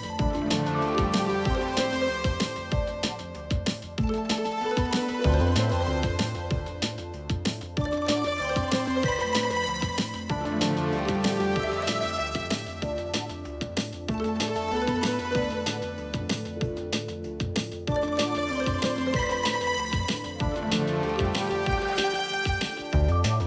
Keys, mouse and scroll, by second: 0.1 shift+[, 0.1 shift+click, 0.8 ctrl+shift+], 1.3 alt+scroll down 1, 1.6 space, 2.3 alt+scroll up 1, 2.5 space, 6.8 alt+scroll up 1, 6.9 alt+scroll down 1, 11.0-14.8 typing, 12.4 alt+scroll down 1, 14.1 double click, 14.5 alt+scroll up 1.